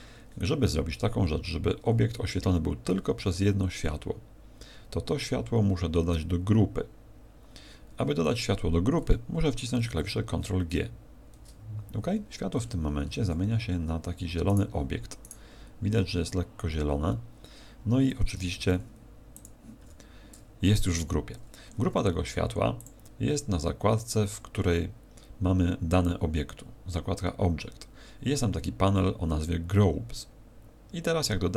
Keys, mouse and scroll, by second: 19.8 n, 22.8 click.